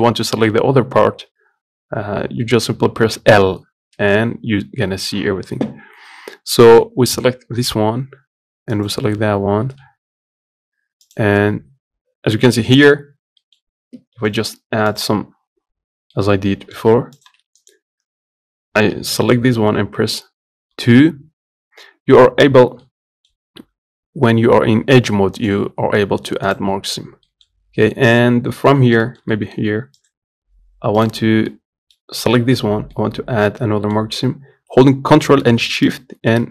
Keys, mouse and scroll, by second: 0.9-1.5 scroll down 2, 1.6 scroll up 3, 3.0 l, 8.6 click, 10.9 click, 13.2 middle click, 13.7 Tab, 15.9-16.9 middle drag, 16.9 shift+click, 18.9-20.4 middle drag, 20.4 2, 22.6-26.2 middle drag, 26.2 right click, 26.6 scroll down 1, 26.9 middle click, 27.2-27.6 scroll up 1, 27.6 middle click, 28.4-28.7 scroll up 2, 28.7-29.8 shift+middle drag, 29.8 click, 30.8 click, 31.2 middle click, 32.0 scroll up 2, 32.6-35.7 middle drag, 35.7 ctrl+shift+click, 36.2 scroll down 1.